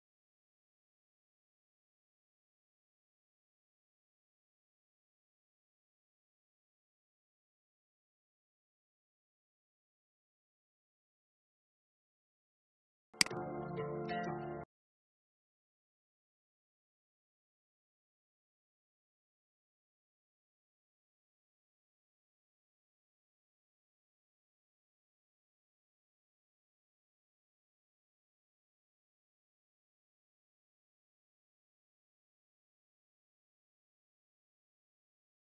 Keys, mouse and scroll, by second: 0.9 shift+i, 1.7 click, 2.7 v, 3.3 click, 4.3 alt+scroll down 1, 5.1 click, 5.7 alt+scroll up 1, 6.8-7.4 scroll down 1, 7.4-8.9 scroll up 1, 8.9 click, 10.1 shift+click, 10.9-11.7 scroll down 1, 12.3-20.3 shift+drag, 33.8 click.